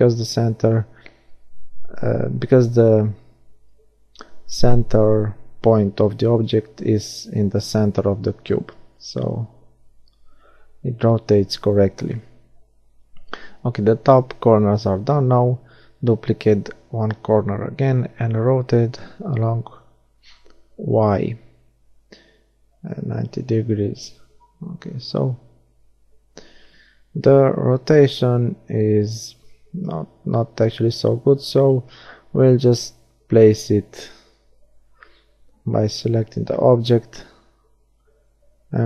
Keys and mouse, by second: 6.3 middle click, 9.5 shift+d, 10.3 click, 13.1 r, 20.4 middle click, 21.3-23.1 drag, 23.1 middle click, 24.2 g, 30.3-31.4 middle drag, 31.6 g, 32.7-34.4 drag, 33.5 g, 35.0 middle click, 36.0 g, 37.0 middle click, 38.0 click.